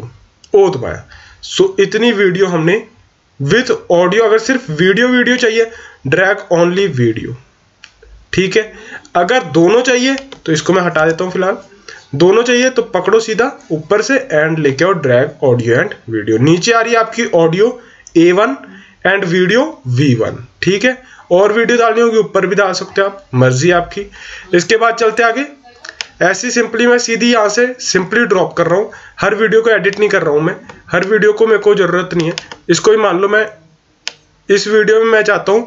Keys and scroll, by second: 10.9 BackSpace.